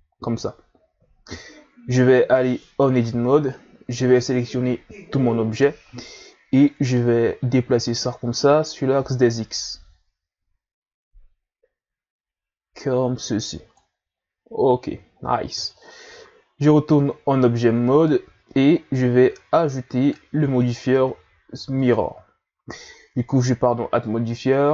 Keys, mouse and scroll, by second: 1.1-2.3 shift+scroll up 1, 2.3 Tab, 3.8 a, 4.2 a, 6.6-9.6 drag, 15.1-15.5 ctrl+scroll up 1, 15.5 Tab, 20.0-24.7 drag.